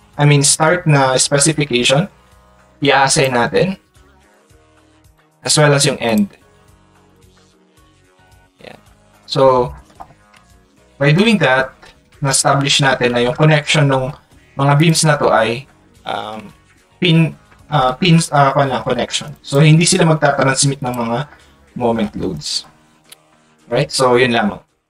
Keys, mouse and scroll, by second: 3.1 click, 4.3 click, 9.9 click, 14.8 click, 19.5 right click, 20.9 click, 24.6 Tab.